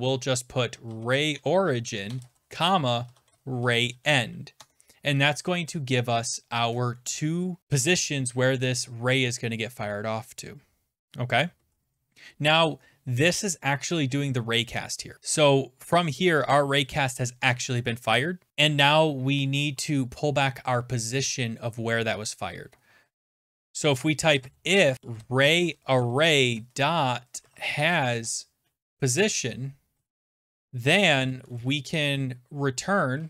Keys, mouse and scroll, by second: 0.5-6.1 typing, 4.6 Tab, 7.0 Return, 10.5 Return, 15.1 click, 18.1 click, 18.5 click, 24.1-33.2 typing.